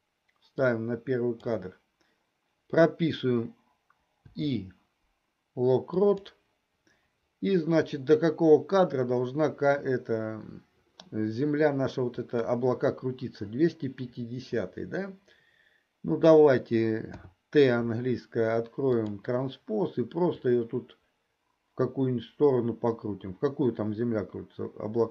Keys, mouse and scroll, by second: 0.8 click, 4.2 i, 12.3 click, 17.1 t, 18.9 click, 20.5-25.1 drag.